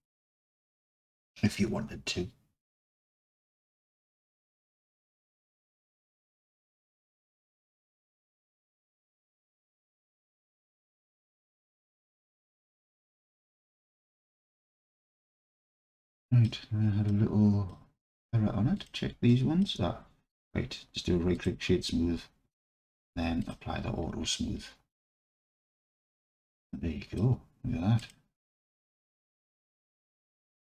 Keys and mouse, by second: 2.8-3.4 alt+drag, 4.3-5.3 alt+drag, 7.5 click, 8.1 Tab, 9.7 click, 11.5 Tab, 12.2 Tab, 12.8 Tab, 13.2-14.8 drag, 16.0-16.5 alt+drag, 17.1-17.7 drag, 18.7 click, 19.3 alt+middle click, 19.5 alt+click, 20.4-21.5 drag, 23.4 click, 25.0-26.5 alt+drag, 26.7-27.2 drag.